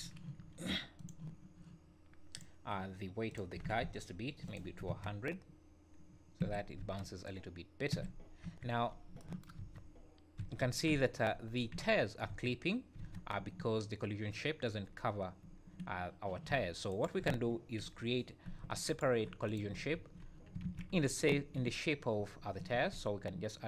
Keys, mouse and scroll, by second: 1.0 click, 2.3 click, 3.3 click, 3.8 KP_0, 4.9 space, 6.4 Escape, 6.8 space, 7.9 Escape, 8.4 KP_1, 8.8 scroll up 4, 9.6-13.0 typing, 9.8-10.5 scroll down 4, 11.3 scroll up 3, 15.4 `, 16.9 shift+right click, 17.8 KP_1, 18.9 shift+right click, 19.4 click, 19.9 shift+s, 20.6 alt+a, 21.3 `, 21.6 scroll up 2, 22.7 shift+a.